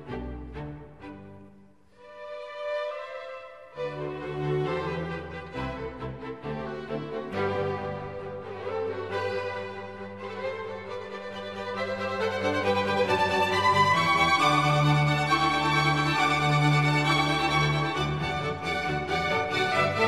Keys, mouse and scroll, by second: 6.0 click, 17.6 Delete, 19.4 ctrl+d.